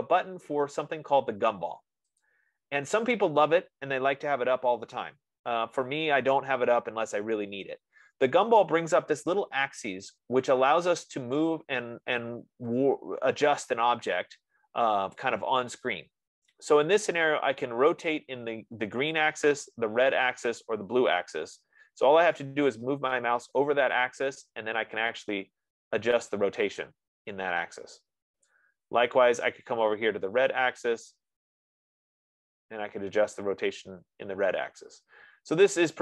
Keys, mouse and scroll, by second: 2.6-7.6 drag, 28.9-31.4 drag.